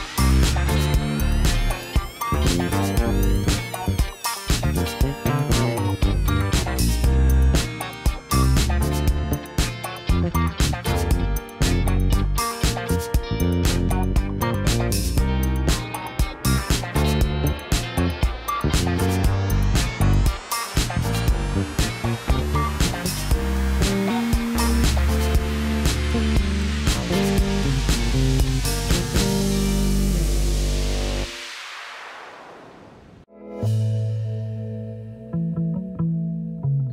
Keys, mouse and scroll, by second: 0.5 click, 1.0 click, 2.3 click, 3.3 Tab, 7.0 click, 11.4 click, 13.6-16.5 drag, 19.1 Tab, 20.2 click, 20.6 click, 20.9 click, 22.4-23.7 drag, 24.9 click, 25.8 click, 28.6 click, 31.4 Tab.